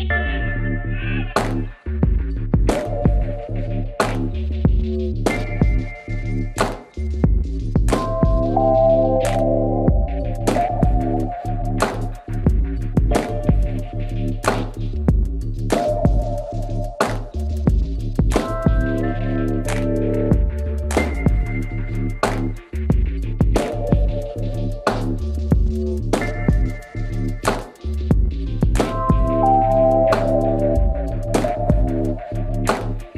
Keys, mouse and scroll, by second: 3.3-5.0 right drag, 4.7 ctrl+s, 7.9 c, 10.7 right click, 10.9-12.2 middle drag, 12.2 right click, 12.4-14.4 drag, 12.9 c, 16.7-17.9 right drag, 17.9 KP_Decimal, 21.9 e, 22.8-24.0 middle drag, 23.7 z, 24.4 s, 27.0 KP_3, 27.3 KP_Decimal, 27.9-29.9 middle drag, 28.5 z, 28.8 s, 31.1 ctrl+z, 31.4 ctrl+z, 32.5 c.